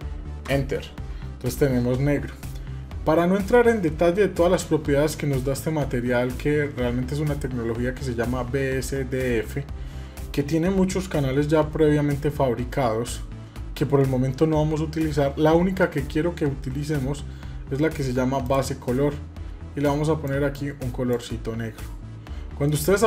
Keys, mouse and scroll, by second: 3.1 scroll down 2, 3.8-4.2 scroll down 8, 4.7 scroll up 1, 7.2 scroll up 6, 10.2-10.6 scroll down 3, 13.2 scroll down 2, 13.8 scroll up 3, 18.2 click, 22.5-23.0 middle drag.